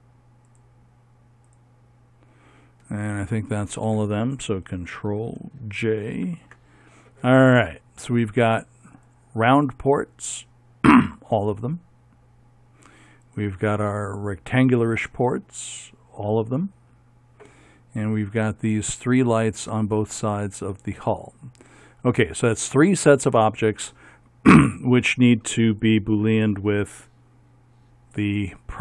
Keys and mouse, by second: 6.3 ctrl+j, 9.1-11.0 right drag, 13.4-15.9 right drag, 15.9 middle click, 17.0 click, 18.6 click, 19.7-23.6 middle drag, 24.5-25.8 middle drag, 26.2-28.8 right drag.